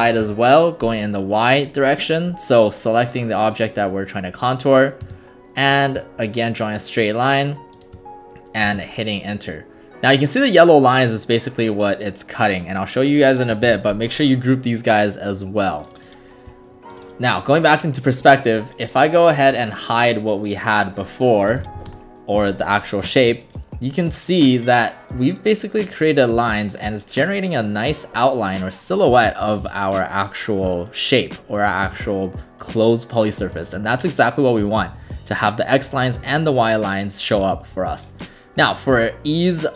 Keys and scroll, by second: 0.0-0.2 typing, 0.2 Return, 5.1 space, 8.7 shift+space, 13.7 ctrl+g, 21.2-22.3 typing.